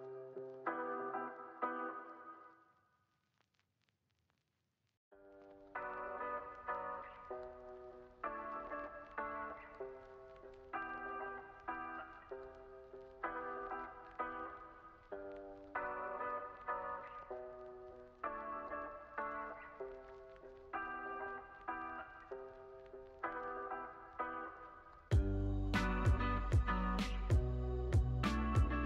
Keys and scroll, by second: 2.8 x, 4.4 super+c, 4.6 super+v, 5.1 x, 6.3 z, 8.5 x, 10.5 super+c, 10.7 super+v, 15.5 x, 20.9 w, 21.4 z, 22.0 x, 23.7 k, 25.4 k, 27.3 k.